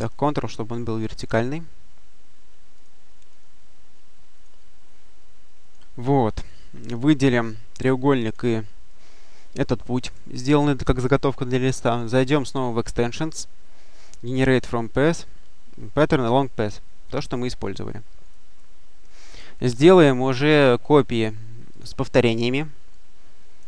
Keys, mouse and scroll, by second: 0.8 ctrl+click, 2.6 click, 4.2 click, 5.5 click, 7.1 shift+click, 12.4 click, 16.9 click, 18.2-19.4 drag, 19.4 click, 21.6 click.